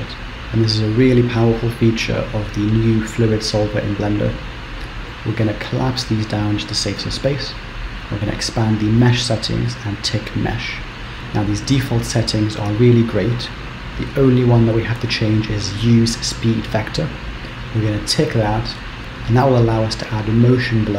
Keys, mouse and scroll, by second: 2.2 click, 3.3-5.1 scroll up 14, 6.0 click, 6.6-7.1 scroll down 2, 9.0 click, 10.2 click, 16.0 click.